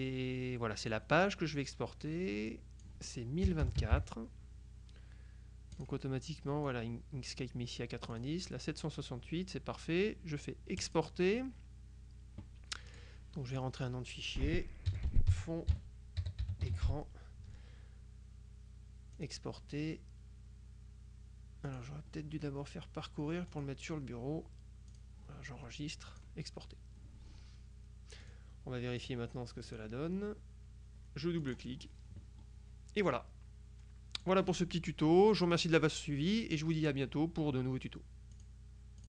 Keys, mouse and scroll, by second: 0.9 click, 2.5 click, 3.5 KP_1, 3.7 KP_0, 3.9 KP_2, 4.0 KP_4, 5.9 click, 6.7 click, 8.2 click, 10.9 click, 13.0-14.1 drag, 14.7-17.4 typing, 19.3 click, 21.7 click, 23.6 click, 25.0 click, 26.2 click, 28.3 click, 29.1 click, 29.8 click, 31.5 click, 33.2-34.8 drag, 38.5 click.